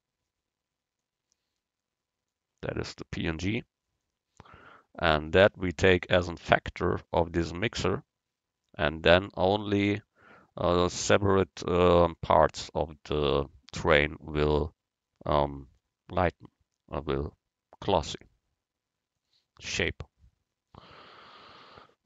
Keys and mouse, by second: 1.1-2.7 drag, 4.1-7.2 drag, 18.0-19.8 drag.